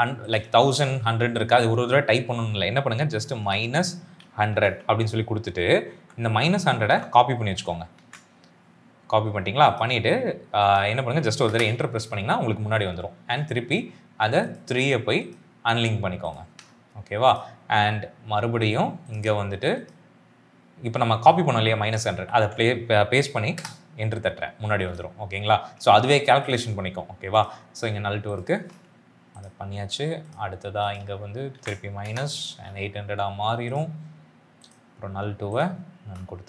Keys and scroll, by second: 4.0 1, 4.4 0, 4.6 0, 5.8 shift+Left, 6.2 shift+Left, 6.7 Left, 7.8 ctrl+c, 11.4 Return, 22.0 ctrl+v, 23.4 Return, 31.4 ctrl+v, 31.9 Return.